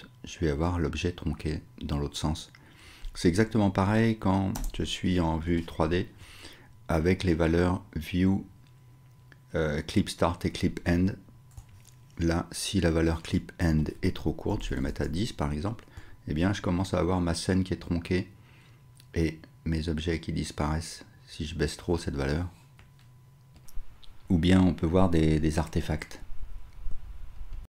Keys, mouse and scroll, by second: 3.4 n, 4.5 KP_0, 4.9-6.4 drag, 11.5-21.9 shift+drag, 21.9-27.7 shift+middle drag.